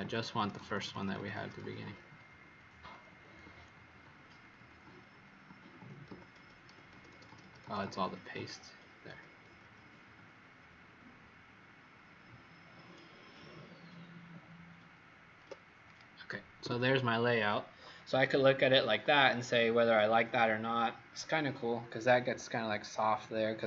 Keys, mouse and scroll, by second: 0.1 ctrl+z, 0.5 ctrl+z, 0.7 ctrl+z, 0.9 ctrl+z, 1.1 ctrl+z, 1.3 ctrl+z, 1.6 ctrl+z, 1.8 ctrl+z, 2.0 ctrl+z, 2.4 ctrl+z, 3.0 ctrl+z, 3.4 ctrl+z, 3.7 ctrl+z, 3.9 ctrl+z, 4.3 ctrl+z, 4.5 ctrl+z, 4.8 ctrl+z, 5.1 ctrl+z, 5.4 ctrl+z, 6.0 ctrl+z, 6.3 ctrl+z, 6.6 ctrl+z, 6.9 ctrl+z, 7.1 ctrl+z, 7.2 ctrl+z, 7.4 ctrl+z, 7.6 ctrl+z, 7.7 ctrl+z, 8.3 ctrl+z, 9.1 ctrl+z, 9.4 ctrl+z, 9.7 ctrl+z, 10.1 ctrl+z, 10.5 ctrl+z, 11.1 ctrl+z, 11.5 ctrl+z, 11.9 ctrl+z, 12.7 ctrl+z, 14.2 ctrl+z, 14.9 ctrl+z, 15.8 click, 16.5 w.